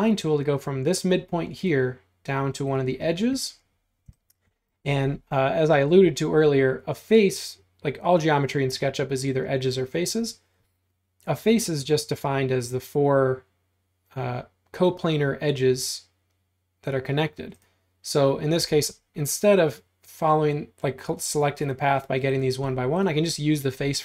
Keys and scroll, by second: 3.4 space.